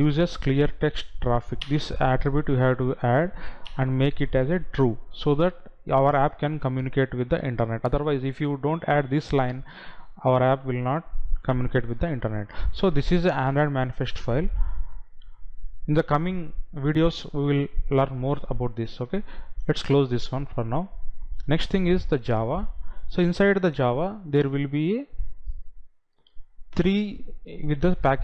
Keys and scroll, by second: 0.1 Down.